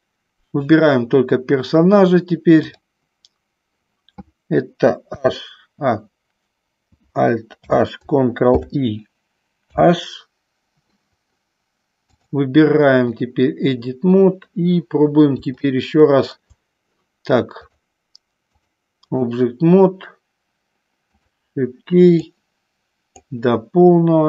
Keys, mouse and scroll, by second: 2.7 click, 5.1 h, 7.7 alt+h, 8.6 ctrl+i, 9.7 h, 12.2-13.4 drag, 15.6 shift+middle click, 17.6 click, 18.6 click, 22.5 click.